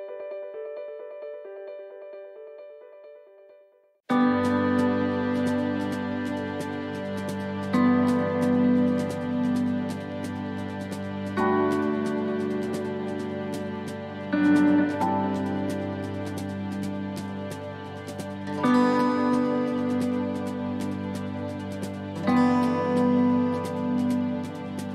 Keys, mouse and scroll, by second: 0.2 click, 5.0 click, 5.8 click, 6.2 click, 7.6 click, 10.1 a, 10.8 middle click, 11.2-12.1 scroll down 4, 12.1 shift+middle click, 13.0 u, 15.7-16.2 scroll up 2, 16.2 shift+middle click, 17.4 click, 18.3 scroll, 20.9-21.2 scroll, 22.4 s.